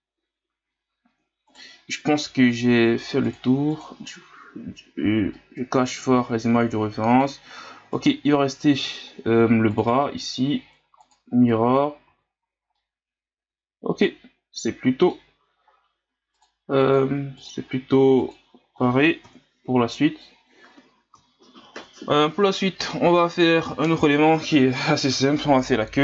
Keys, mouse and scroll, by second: 1.5 right click, 3.2 click, 3.7 click, 5.2 scroll up 1, 5.3-7.5 middle drag, 7.5-7.9 scroll up 1, 7.9 right click, 9.7-12.1 drag, 12.1 a, 12.4 scroll down 2, 12.7-15.7 middle drag, 16.3 click, 16.8 click, 17.4 click, 18.2 click, 19.2 KP_1, 20.3 scroll up 1.